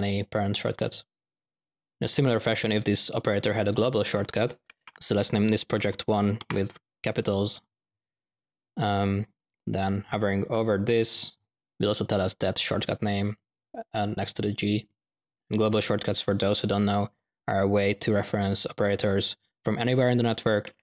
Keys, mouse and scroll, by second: 0.8-1.2 drag, 5.9 click, 6.3-6.7 drag, 10.3 typing.